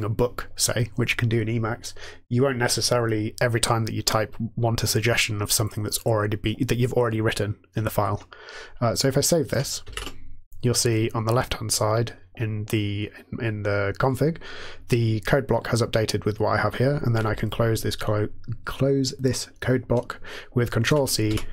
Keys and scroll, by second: 9.8 ctrl+s, 20.9 ctrl+c, 21.2 '.